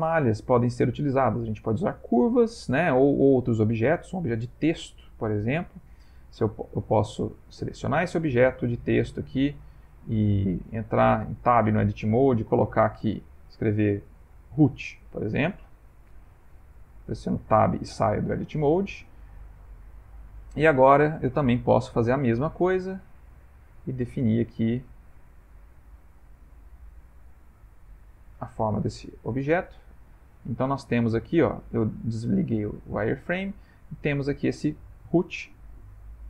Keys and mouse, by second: 8.4 ctrl+middle click, 8.6 ctrl+middle click, 9.4 middle click, 10.5 shift+middle click, 11.1 middle click, 11.7 Tab, 12.5-14.7 typing, 14.9 Return, 16.1 BackSpace, 17.5 Tab, 18.0 middle click, 19.1 shift+middle click, 20.1 middle click, 21.6 click, 23.3 click, 25.6 middle click, 25.8 middle click, 25.9 middle click, 26.0 middle click, 27.2 click, 29.5 click, 30.3 middle click, 33.4 middle click, 34.2 middle click.